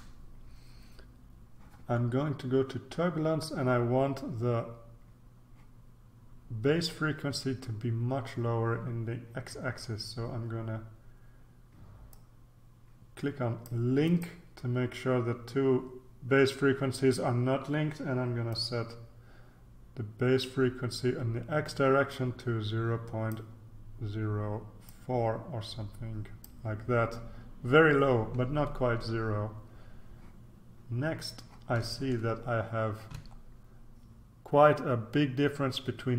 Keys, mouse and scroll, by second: 12.1-14.8 drag, 18.5-23.9 drag, 24.8-27.0 drag, 32.2-33.1 ctrl+scroll up 2, 33.1-33.9 ctrl+scroll up 1.